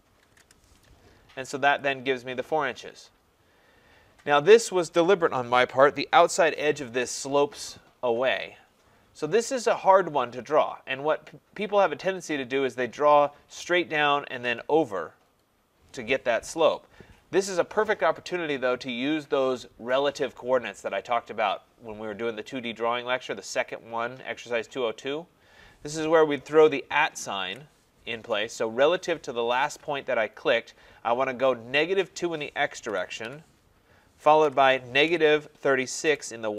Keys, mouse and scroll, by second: 0.3 shift+', 1.8 click, 3.6 middle click, 3.7 middle click, 26.5 middle click, 27.4 @, 32.9-36.5 typing.